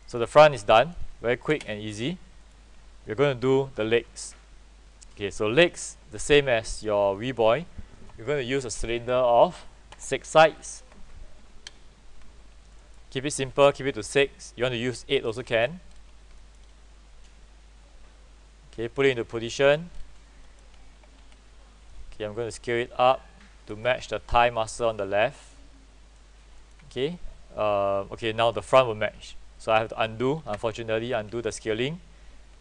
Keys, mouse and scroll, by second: 0.1 middle click, 0.3-0.7 scroll down 1, 2.5 middle click, 3.1 alt+middle click, 3.8 scroll down 1, 4.2 alt+middle click, 6.4 right click, 7.3 click, 11.6 KP_6, 12.9 middle click, 14.2-15.5 drag, 15.7-16.2 scroll up 1, 16.5 alt+middle click, 16.7-17.3 scroll up 1, 17.3-19.3 drag, 19.6 alt+middle click, 20.0-20.4 scroll up 1, 22.0-24.0 drag, 24.0 w, 24.8 click, 26.7 alt+middle click, 30.5 ctrl+z, 31.4 ctrl+z.